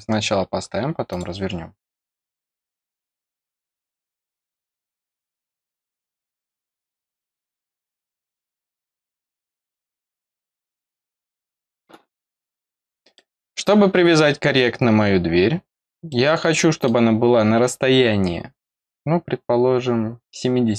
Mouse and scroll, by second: 1.0 click, 2.7 click, 6.0 click, 7.9 click, 11.2 click, 12.5 scroll up 1, 13.1 middle click, 15.6 scroll down 1, 16.0 middle click.